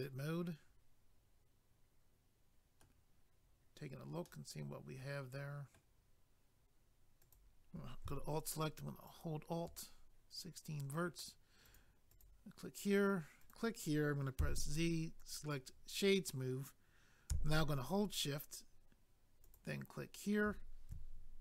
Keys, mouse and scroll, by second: 0.0 middle click, 4.3 middle click, 7.2 click, 7.3 click, 9.1 alt+click, 9.2 alt+click, 11.6 click, 11.7 click, 12.1 click, 12.2 double click, 13.4 click, 13.5 click, 14.4 z, 15.2 click, 15.3 click, 19.4 shift+click, 19.5 shift+click.